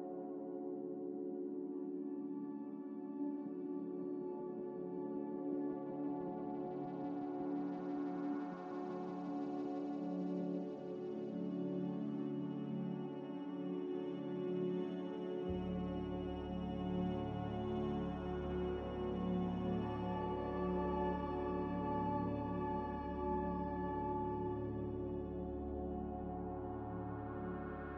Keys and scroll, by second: 1.4-2.5 typing.